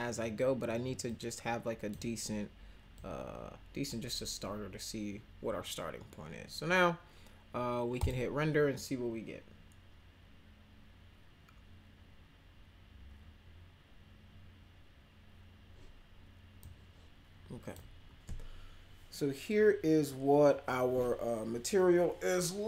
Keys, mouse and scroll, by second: 1.1 click, 2.9-3.9 drag, 8.0 click, 16.6-17.8 drag.